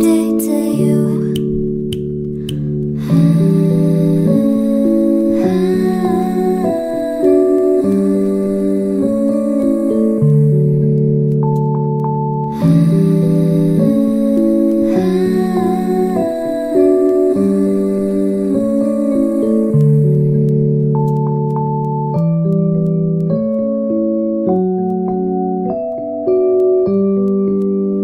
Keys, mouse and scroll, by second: 9.4-10.3 typing, 14.5-15.2 typing, 21.2-22.0 typing.